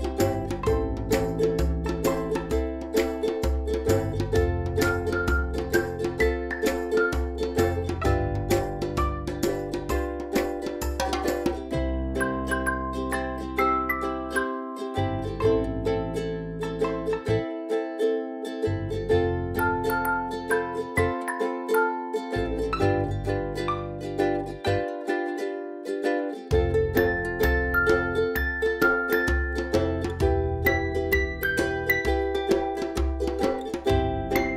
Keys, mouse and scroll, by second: 0.4 space, 0.6-1.0 click, 0.8 space, 1.3-3.1 drag, 3.3 ctrl+z, 4.8-5.4 drag, 16.8 click, 18.8 scroll up 1, 19.0 space, 19.3 click, 19.4 space, 19.8 v, 20.1 click, 21.2 right click, 21.7-22.8 drag, 28.9 space, 29.0-29.4 click, 29.2 space, 29.6-30.0 drag, 31.1-31.5 drag, 32.8 drag.